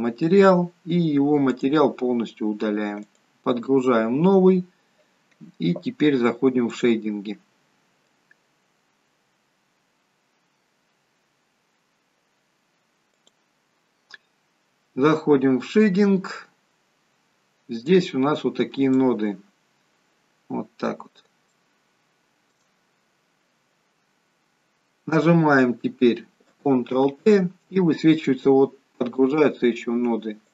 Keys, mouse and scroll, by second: 1.5 click, 7.9 click.